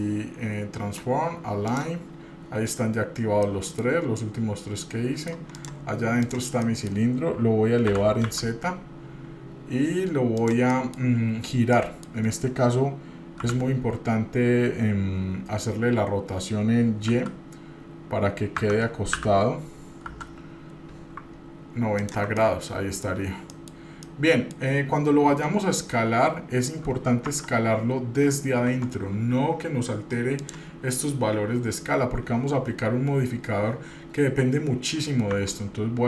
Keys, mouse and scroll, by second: 3.6-4.0 middle drag, 4.1 scroll up 1, 4.4-5.5 middle drag, 5.7 drag, 6.4 click, 6.8 middle click, 8.1 g, 10.9 middle click, 11.9 middle click, 13.6 g, 19.3 r, 22.5 middle click, 23.5 scroll up 1, 23.8 middle click, 24.2 middle click, 24.2 scroll down 1, 27.5 Tab, 28.8 Tab, 30.5 click, 35.5 Tab.